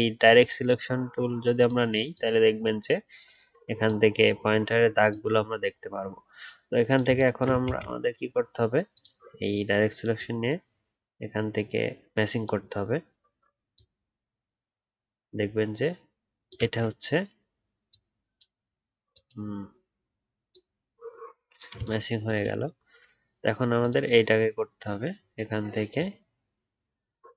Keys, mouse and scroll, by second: 7.6 ctrl+z.